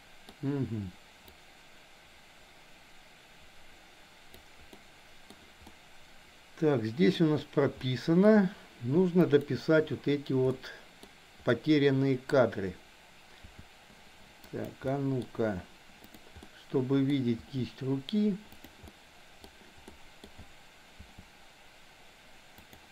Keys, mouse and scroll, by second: 1.4-4.5 drag, 4.7-5.2 middle drag, 5.6-7.2 middle drag, 7.9 middle click, 9.2 click, 10.5 middle click, 11.5 middle click, 13.4 r, 14.9 middle click, 15.1-16.1 scroll down 1, 16.1 click, 16.5 middle click, 17.4 r, 18.9-19.4 scroll up 1, 20.0 middle drag, 20.2 scroll down 1, 21.0 r.